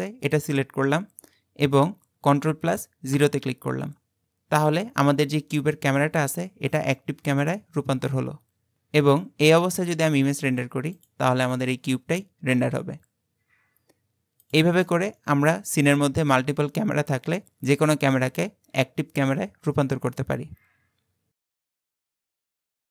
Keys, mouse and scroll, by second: 0.3 click, 1.0-2.6 scroll up 4, 3.2 ctrl+KP_0, 10.5 click, 11.0-14.1 drag, 14.9-15.3 middle drag, 15.3-16.3 scroll down 5, 16.3-18.3 scroll up 1, 18.3-18.6 scroll up 1.